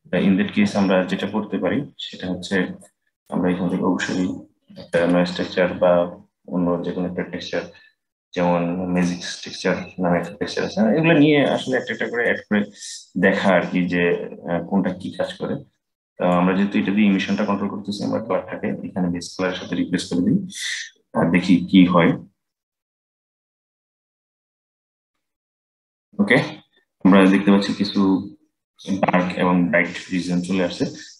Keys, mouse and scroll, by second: 0.8 click, 2.5-4.4 middle drag, 4.4 shift+a, 12.0-15.0 drag, 15.5-21.0 drag, 26.1-27.3 middle drag, 27.3-28.6 scroll up 2, 28.6-30.5 scroll up 1, 30.5-31.1 middle drag.